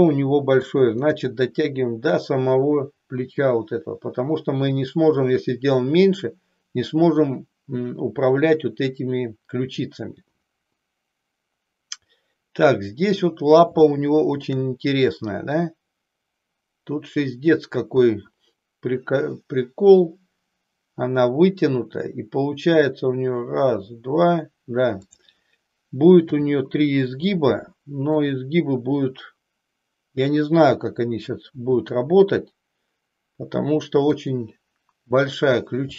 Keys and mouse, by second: 1.3 click, 13.9 shift+middle click, 26.4 e, 28.2 click, 31.5 e.